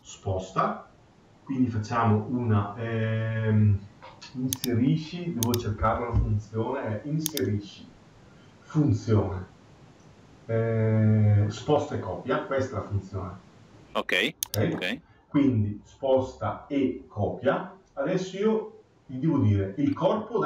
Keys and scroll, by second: 5.7 Escape.